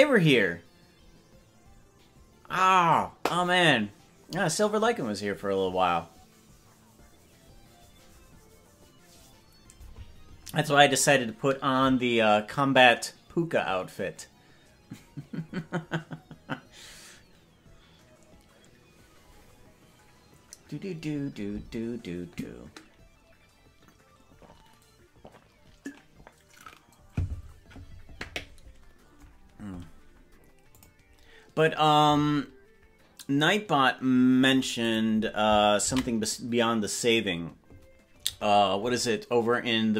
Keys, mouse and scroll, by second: 39.4 ctrl+s.